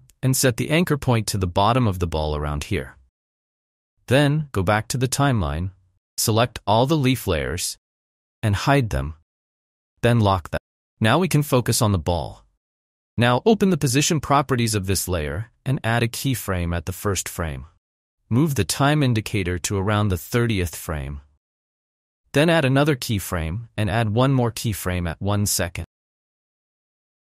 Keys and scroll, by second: 11.9 v.